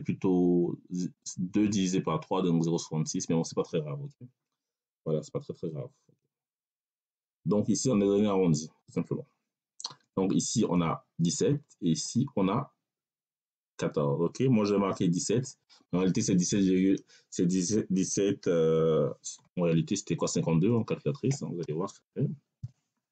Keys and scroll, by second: 21.5 c, 21.9 a, 22.5 l.